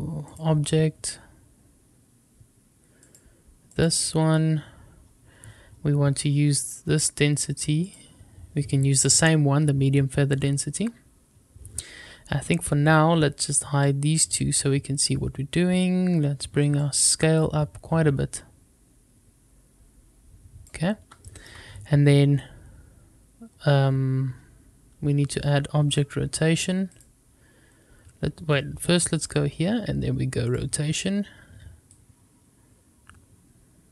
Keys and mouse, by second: 6.5-8.0 drag, 13.8 click, 16.8-20.7 drag, 21.2-22.0 shift+middle drag, 25.9 click, 26.9 click, 30.4 click, 32.0-33.9 drag.